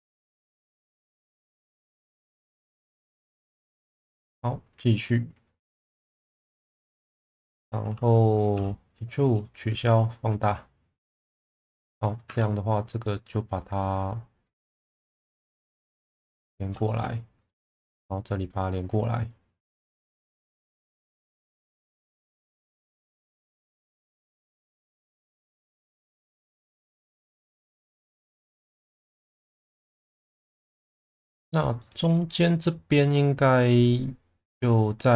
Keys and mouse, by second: 2.5 2, 6.2-6.8 middle drag, 8.5 e, 9.3 right click, 9.7 s, 11.1 click, 11.4-12.0 middle drag, 12.2 1, 12.7 click, 13.0 middle click, 15.7 shift+Tab, 16.8 shift+middle click, 17.4 click, 19.7 middle click, 20.9 click, 21.6 click, 23.9 click, 26.4 click, 28.4 click, 29.8 click, 31.8 shift+middle click.